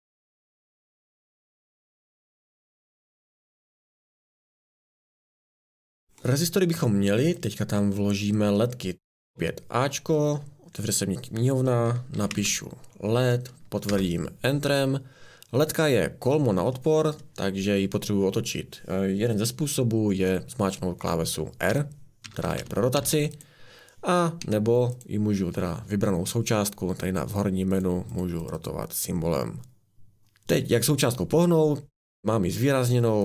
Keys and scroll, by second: 0.3 Right, 0.3-5.5 typing, 9.3 a, 11.8-12.8 typing, 13.9 Return, 21.7 r, 22.2 r, 22.6 r, 23.0 r, 24.4 Escape.